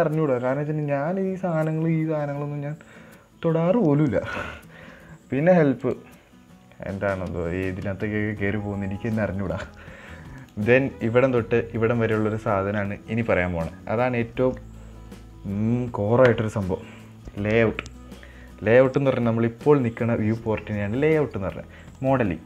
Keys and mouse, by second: 6.2-10.8 drag.